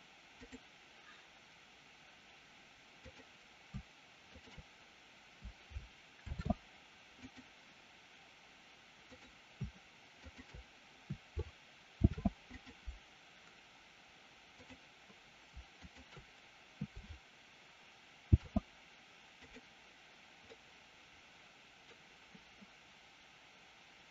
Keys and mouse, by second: 3.0-3.6 drag, 4.2 shift+click, 6.1 ctrl+shift+c, 12.0 ctrl+shift+c, 14.5-15.2 drag, 15.7 shift+click, 18.2 ctrl+shift+c, 20.5-22.0 middle drag.